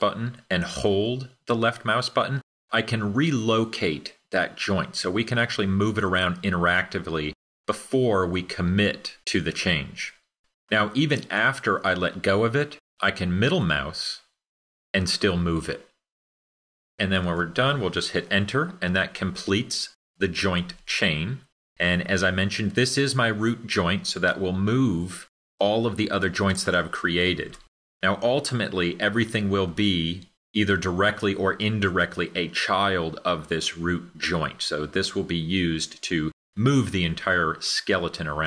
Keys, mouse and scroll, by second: 14.1-19.0 middle drag.